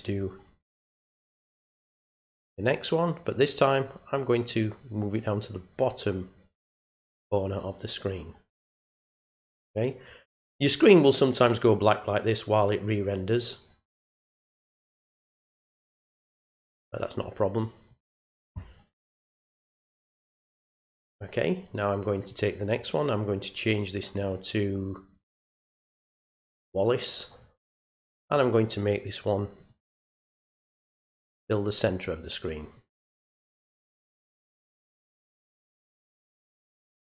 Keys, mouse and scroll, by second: 4.4-7.6 drag, 15.6-17.9 drag, 22.2 click, 24.2 click, 26.5 click, 29.7-31.1 drag, 32.7 click, 35.2 click.